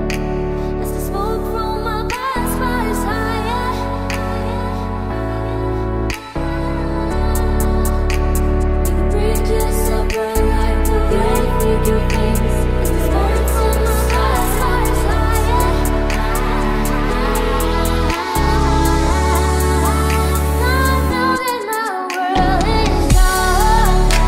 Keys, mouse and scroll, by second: 0.1 middle click, 1.3-4.8 typing, 1.9 Tab, 2.5 Tab, 2.8 Down, 3.5 Tab, 3.6 Tab, 5.4 ctrl+a, 7.3 n, 9.8 middle click, 10.9 middle click, 11.1 middle click, 11.1 middle click, 12.4 middle click, 13.2 middle click, 14.5-15.0 middle drag, 15.1 middle click, 16.3-19.5 middle drag, 20.0 middle click, 23.1 n.